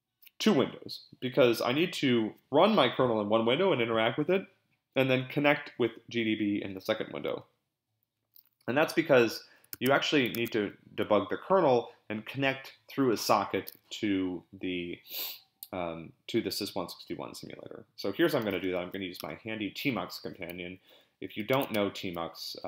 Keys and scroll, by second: 9.7 super+Tab, 10.3 super+Tab, 18.1-19.3 typing, 21.5 ctrl+x, 21.7 ctrl+c.